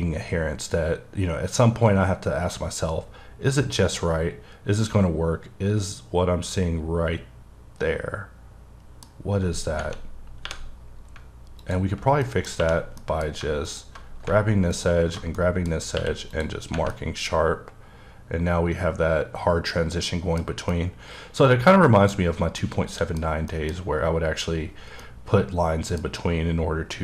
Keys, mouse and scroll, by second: 10.5 3, 10.9 scroll up 1, 11.6 alt+click, 12.2 middle click, 12.6 2, 13.0 alt+middle click, 13.7 alt+click, 15.4 middle click, 16.0 q, 16.3 click, 16.9 middle click, 20.4 scroll down 2, 20.7 middle click, 22.2-22.6 scroll up 2, 22.6 middle click, 23.5 middle click, 25.3 middle click.